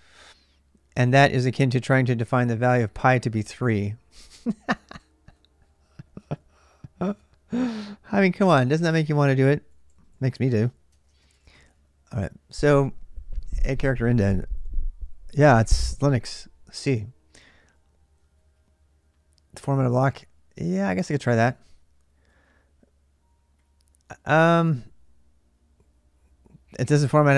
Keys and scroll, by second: 6.3 typing.